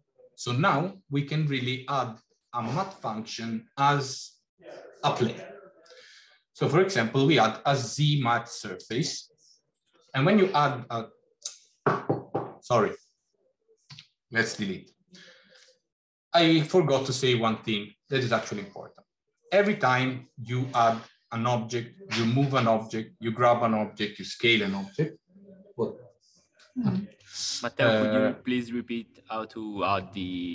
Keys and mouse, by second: 13.8 x.